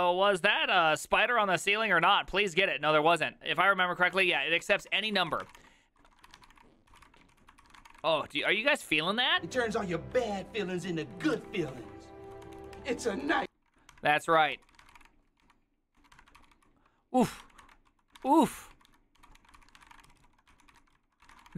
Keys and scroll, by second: 4.6-10.8 typing, 11.1 ctrl+u, 11.8 ctrl+d, 12.1-21.5 typing, 14.6 ctrl+c, 20.6 ctrl+c, 20.8 ctrl+c, 21.3 ctrl+c, 21.4 ctrl+:.